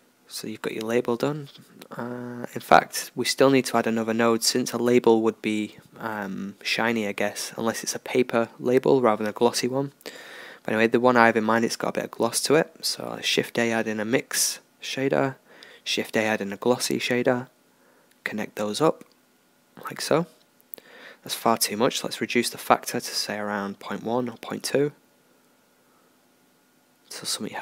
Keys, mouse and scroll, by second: 5.9 shift+a, 10.0-11.2 drag, 11.2 shift+a, 19.0-21.4 middle drag, 21.4 right click, 23.3-27.2 right drag.